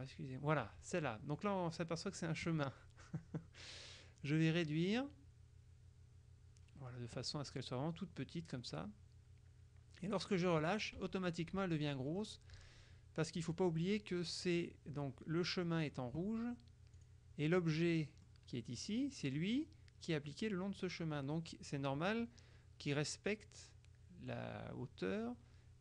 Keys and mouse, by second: 4.3-10.6 drag, 13.5 click, 17.1 click, 18.1 click.